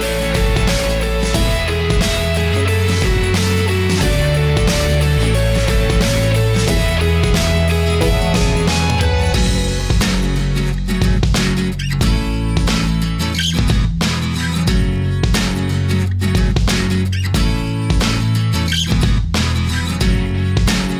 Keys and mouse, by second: 1.8-3.4 drag, 7.9-9.5 drag, 10.6-12.2 drag, 13.5-14.0 middle drag, 14.7-17.3 middle drag, 18.3-19.3 shift+middle drag.